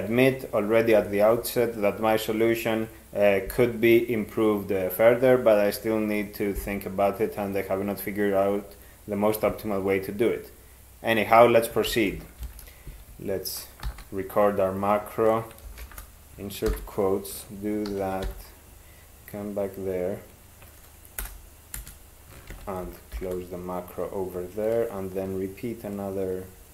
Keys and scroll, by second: 11.9 ctrl+x, 12.4 (, 13.9 alt+d, 15.8 ", 16.7 ctrl+y, 17.9 ctrl+f, 18.2 ,, 21.2 Delete, 21.8 space, 22.5 ctrl+x, 23.2 ).